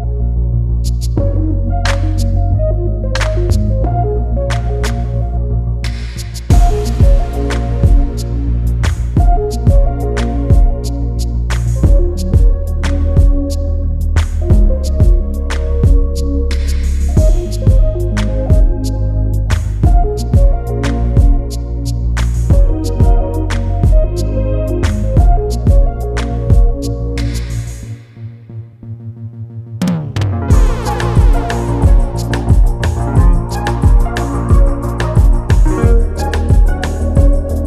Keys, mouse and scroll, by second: 0.0 scroll down 3, 0.1-0.5 scroll up 1, 0.5 click, 0.8 scroll up 2, 1.0-1.5 scroll down 3, 1.5-4.1 typing, 3.9 scroll up 1, 4.9 click, 5.4 click, 5.5 click, 5.7 scroll up 4, 5.9-6.4 scroll down 3, 6.4 h, 7.3 alt+h, 7.7 g, 9.0 click, 9.5 click, 9.8-10.1 scroll down 2, 10.1 g, 11.5 click, 11.6-12.1 scroll up 4, 12.1 click, 12.8 g, 13.9 s, 14.4 g, 16.2 scroll down 3, 16.5 click, 17.1 click, 17.2 scroll down 3, 17.4 scroll up 1, 17.6 click, 18.5 click, 19.4 click, 19.6-19.9 scroll up 6, 19.9 scroll down 4, 20.2-20.6 scroll up 1, 20.6 shift+d, 23.0 click, 23.2-23.5 scroll down 1, 23.5 g, 25.2 click, 25.8 click, 26.6 shift+click, 26.9 click, 27.2-27.6 scroll down 3, 27.6 shift+d, 28.7 click, 29.0 scroll down 2, 29.4 click, 29.7-30.2 scroll up 8, 30.2 g, 31.4 click, 31.6 click, 31.9 g, 33.4 click, 34.0 shift+d, 35.5-35.8 scroll down 2, 35.8 click, 36.2-36.6 scroll down 1, 36.9 click.